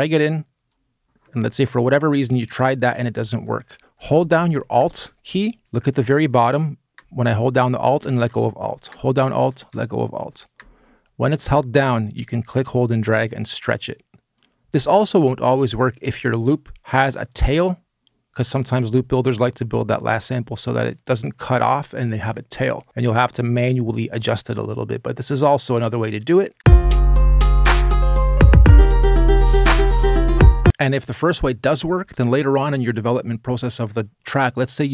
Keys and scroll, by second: 26.3 space.